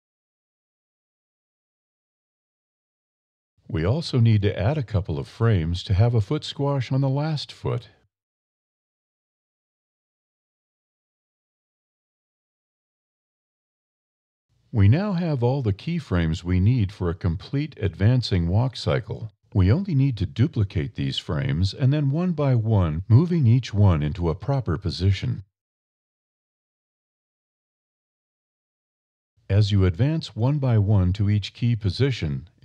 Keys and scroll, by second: 7.4 e, 14.8 e, 21.0 a, 21.2 b, 23.6 shift+d.